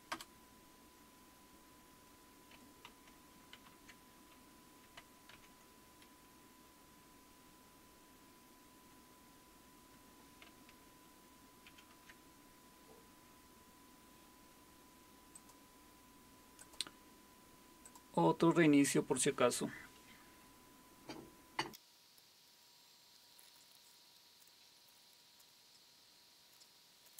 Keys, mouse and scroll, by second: 0.1 Return, 3.5 super+5, 5.3 super+w, 11.7 alt+super+q, 15.3-18.6 drag, 22.2 Return, 22.6 click, 22.8-24.2 typing, 23.3 click.